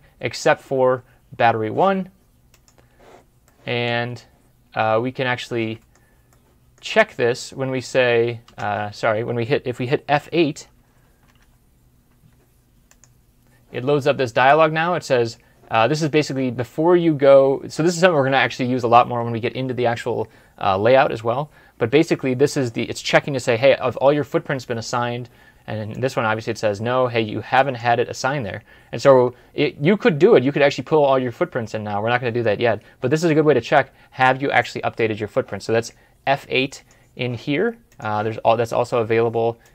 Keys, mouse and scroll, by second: 3.3 middle click, 3.9 scroll up 1, 4.8 scroll down 1, 5.3 middle click, 7.6 alt+Tab, 8.4 alt+shift+Tab, 11.1 F8.